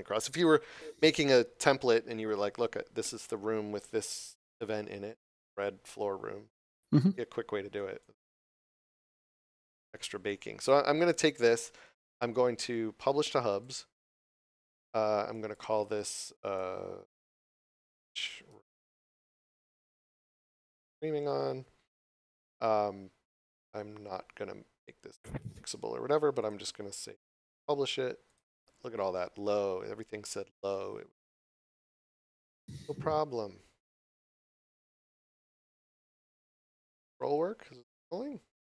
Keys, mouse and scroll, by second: 6.8 click, 7.7 right click, 8.4 middle click, 9.3 scroll down 1, 13.4 click, 35.0 click.